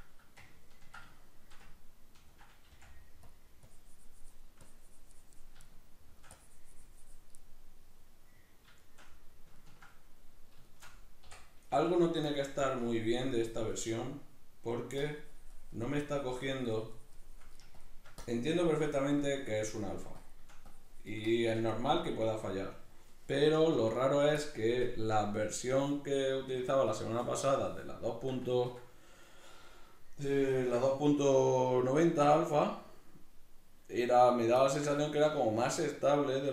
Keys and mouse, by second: 1.1 shift+middle click, 1.7 ctrl+middle click, 2.7 f, 3.3 click, 5.6 shift+middle click, 6.3-7.4 drag, 7.4 middle click, 7.8-11.2 middle drag, 12.3 click, 13.9 middle click, 14.5 middle click, 15.0-21.8 drag, 21.8-24.4 middle drag, 24.4 shift+click, 25.1 middle click, 32.1 shift+r, 34.4 right click, 34.7 ctrl+middle click, 35.6 shift+r.